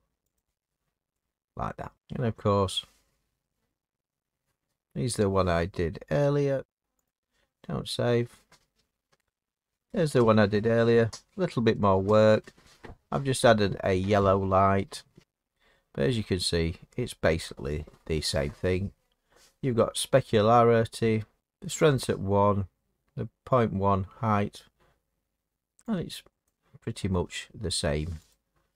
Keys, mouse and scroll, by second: 0.3 click, 1.9 middle click, 6.3 click, 7.0 click, 8.3-8.9 scroll, 9.7-12.0 scroll, 12.0-13.3 scroll, 14.7-16.8 scroll, 15.2 Escape, 26.5 click, 28.3 click.